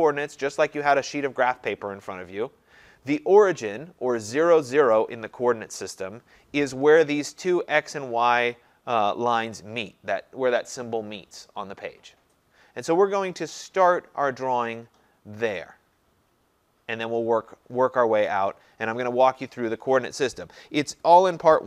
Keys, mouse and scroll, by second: 19.2 scroll down 1, 19.4-19.9 scroll.